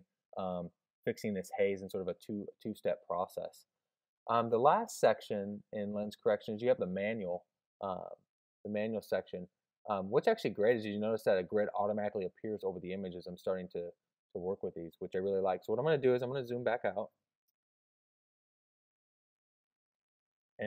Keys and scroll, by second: 17.4 super+space.